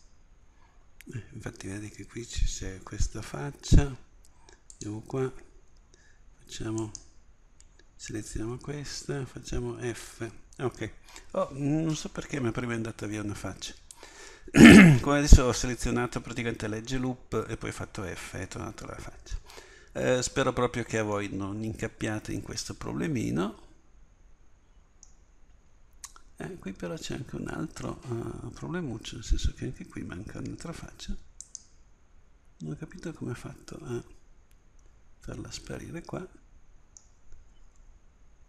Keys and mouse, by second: 9.6 f, 18.5 middle click, 31.5-34.8 right drag, 34.8 f, 35.7-38.0 middle drag.